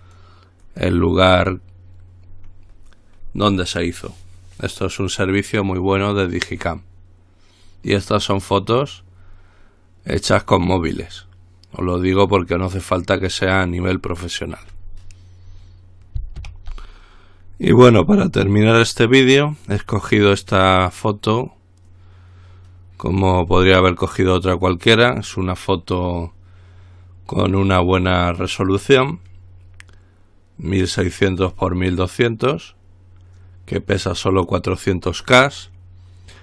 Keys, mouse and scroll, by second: 0.2 click, 16.6 ctrl+r.